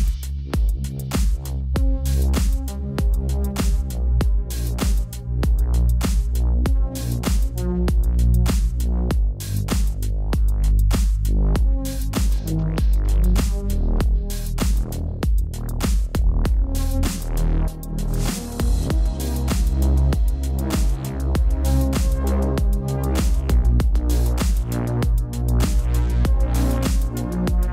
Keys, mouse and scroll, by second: 0.3 shift+click, 0.7 click, 1.9 alt+click, 2.2 alt+click, 2.7 Return, 3.4 ctrl+u, 4.6 click, 19.7 click.